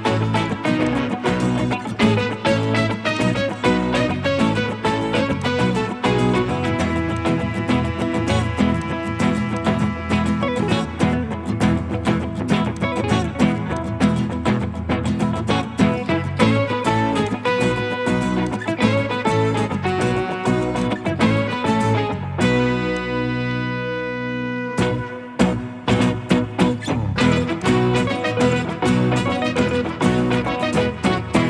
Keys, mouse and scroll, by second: 4.6 scroll up 1, 4.8 Escape.